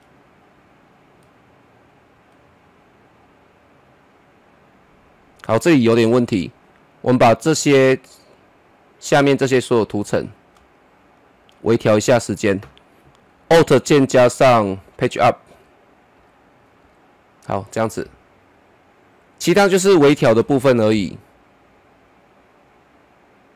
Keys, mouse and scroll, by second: 10.1-10.6 scroll down 1, 10.9 shift+click, 14.8 alt+Num_Lock, 14.8 shift+click, 15.5 alt+Page_Up, 18.9-20.4 drag, 20.4 KP_0.